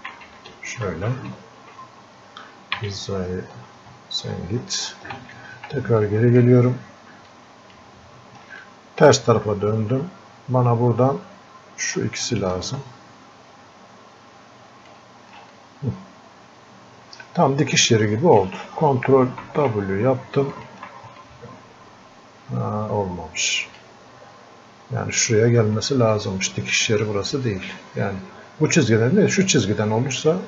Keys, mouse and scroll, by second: 0.1 z, 2.8 z, 5.2 ctrl+z, 6.1-12.7 drag, 12.7-15.5 ctrl+shift+drag, 15.5-19.5 drag, 19.5 ctrl+w, 20.6 ctrl+shift+click, 21.2-26.1 drag, 26.1-30.4 drag.